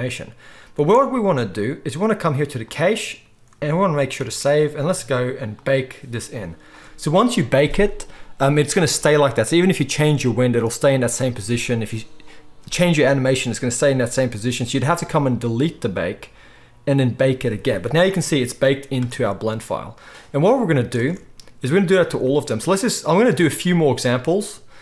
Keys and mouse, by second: 0.9 space, 4.2 ctrl+s, 19.2 space, 21.1 space.